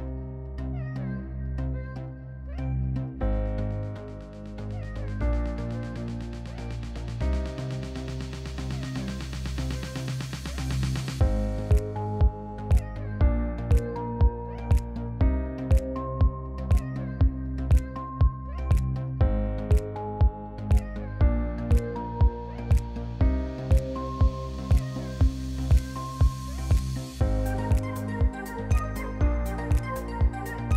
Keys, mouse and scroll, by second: 4.1 click, 5.2 F1, 7.7 click, 9.6 click, 11.2 click, 15.1 click, 15.6 click, 16.2 click, 19.7 click, 22.3 click, 23.3 click, 23.9 F2, 25.3 click, 25.5 Delete, 26.2 click, 26.3 Delete, 27.9 click, 29.0 click, 30.0 click, 30.6 click.